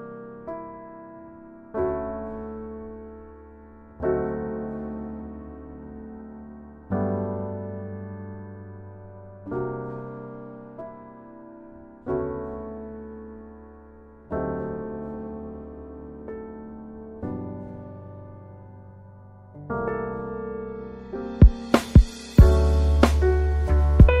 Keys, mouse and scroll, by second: 8.4 z, 10.1-11.7 typing, 10.4 click, 11.2 click, 11.7-12.3 drag, 12.7 drag, 13.3 click, 14.2 click, 14.9 click, 22.0-22.8 typing.